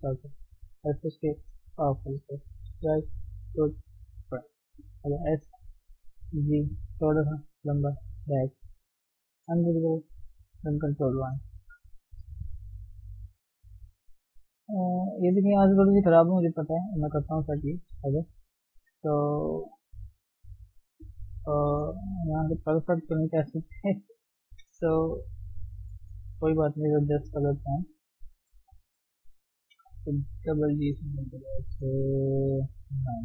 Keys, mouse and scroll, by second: 0.0 right click, 0.7 s, 1.6 r, 2.8 KP_3, 3.3 KP_1, 4.2-4.7 scroll up 2, 5.1 s, 7.3 r, 8.3 g, 9.8 middle click, 10.1 Tab, 10.2-10.8 scroll down 5, 10.6 ctrl+1, 10.8-12.1 middle drag, 12.1 scroll down 1, 12.8 KP_1, 13.0-13.3 scroll down 1, 13.3 KP_3, 13.6-14.9 scroll up 4, 14.9-15.2 scroll down 1, 15.2 shift+z, 16.6 shift+z, 17.5 shift+z, 17.7-20.3 scroll up 7, 18.5 shift+z, 20.3 ctrl+0, 21.0 Tab, 22.9 s, 25.9-27.1 middle drag, 27.1 r, 28.1 middle click, 29.0 click, 29.8 g, 31.4-33.1 middle drag, 33.1 click.